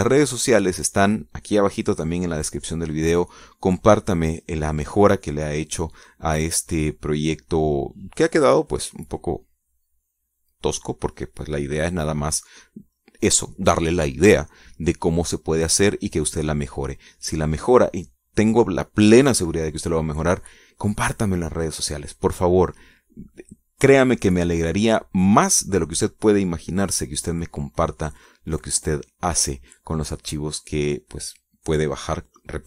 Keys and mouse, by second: 8.3 click, 9.0 click.